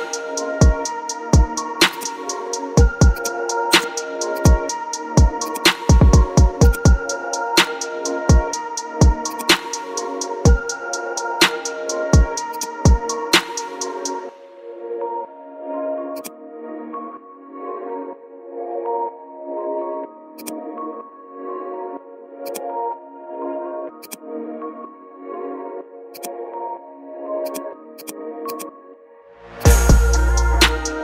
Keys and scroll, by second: 16.9-19.7 typing.